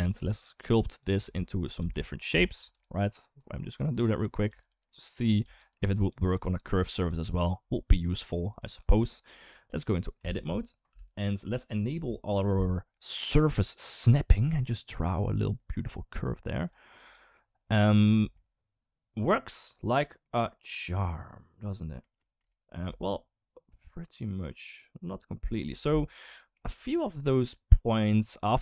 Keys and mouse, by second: 0.4 click, 1.2 middle click, 1.6 f, 2.1 g, 2.5 f, 2.8 click, 3.2 click, 3.4 click, 3.7 click, 3.9 click, 4.3 f, 4.6 click, 4.8 click, 5.2 f, 5.5 click, 5.8 click, 6.0 click, 6.2 click, 6.8 click, 7.7 drag, 8.9 middle click, 9.5 click, 10.0 Tab, 10.7 KP_7, 13.3 click, 15.1-16.5 drag, 16.8 Tab, 17.2-17.5 middle drag, 17.7 click, 18.1-20.2 middle drag, 20.8-21.8 middle drag, 22.0 middle drag, 22.3 shift+middle drag, 22.7-25.3 middle drag, 25.8 shift+middle drag, 26.0 middle drag, 26.8-28.0 middle drag.